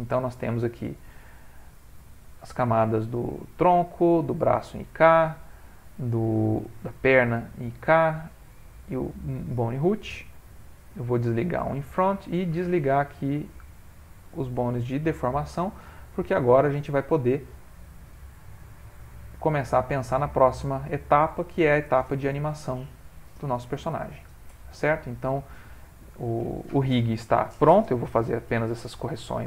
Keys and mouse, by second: 0.7 click, 1.7 click, 4.7 click, 7.2 click, 8.5 click, 9.4 middle click, 12.0 click, 13.7 shift+click, 14.6 middle click, 14.8 middle click, 16.6 click, 16.8 click, 17.9 click, 17.9 g, 22.2 click, 23.3 g, 26.0 middle click, 27.0 middle click, 27.3 middle click, 27.7 middle click, 28.8 middle click, 28.9 ctrl+middle click.